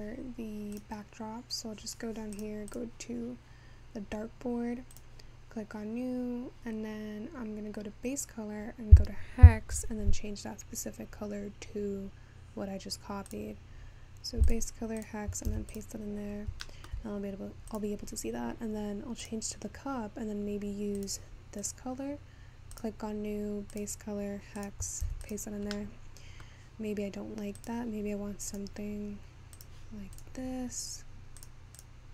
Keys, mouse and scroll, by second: 0.8 click, 1.7-2.0 scroll down 13, 2.4 click, 3.6-4.1 scroll up 9, 5.3-12.5 drag, 12.5-13.3 scroll down 2, 13.3 click, 16.3-17.0 scroll down 3, 17.0 scroll up 4, 17.7-18.9 drag, 22.9-24.0 drag, 26.4-27.8 middle drag.